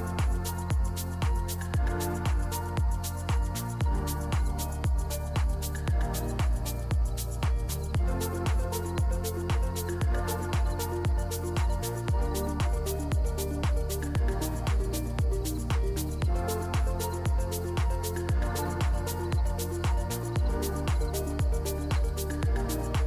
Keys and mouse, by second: 1.6 click, 3.6 shift+a, 5.7 g, 7.3 KP_7, 8.1 r, 11.6 KP_0, 13.0 click, 15.1-17.2 shift+drag, 19.0 shift+a, 20.9 KP_7, 21.6 g, 22.9 KP_0.